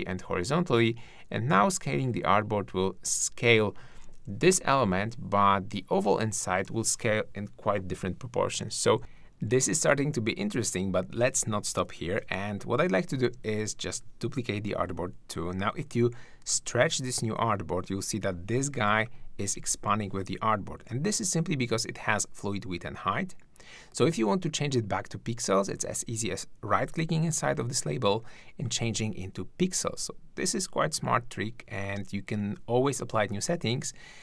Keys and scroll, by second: 11.8 super+-, 12.3 super+space, 14.7 super+d.